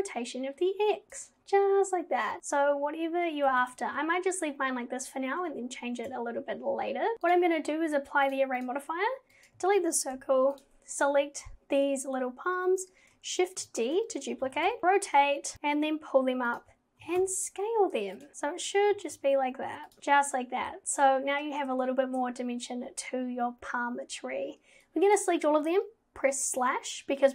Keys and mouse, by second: 3.6 ctrl+z, 8.3-8.7 drag, 9.4 click, 10.2 Delete, 10.6 click, 13.7 shift+d, 14.5 g, 15.5 g, 17.0 g, 19.0 g, 20.0 click, 24.9 click, 26.5 /.